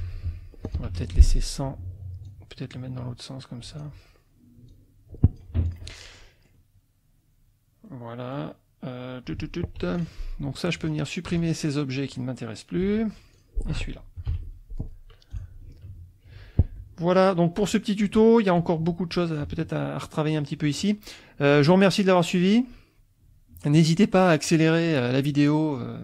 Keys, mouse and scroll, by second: 0.6 ctrl+click, 0.9 ctrl+F2, 2.2-4.0 drag, 4.6 click, 5.5 F1, 5.8 click, 6.1 middle click, 7.9 middle click, 9.8 F2, 9.9 click, 10.8 shift+click, 11.4 shift+click, 12.8 Delete, 13.3 click, 14.2 F1, 14.4 Delete, 15.3 click, 16.7 click, 25.2 click.